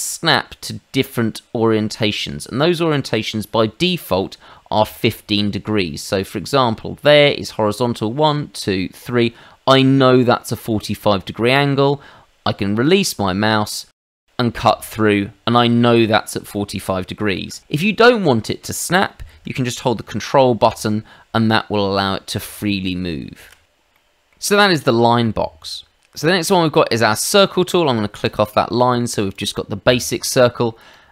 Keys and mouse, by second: 14.1 click, 14.6 middle click, 16.5 middle click, 17.3 ctrl+z, 17.7 click, 19.4 ctrl+click, 23.9 middle click, 26.4 click, 28.2 click, 29.3 click, 30.3 middle click, 30.9 middle click.